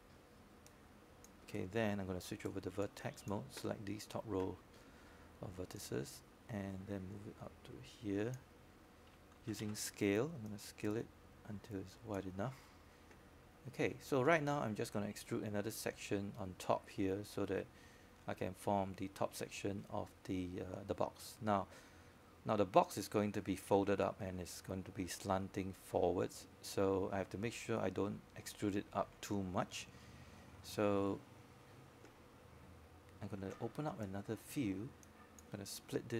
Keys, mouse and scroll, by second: 5.5 right click, 6.9-17.1 drag, 22.1 scroll down 1, 33.5-36.1 scroll up 1.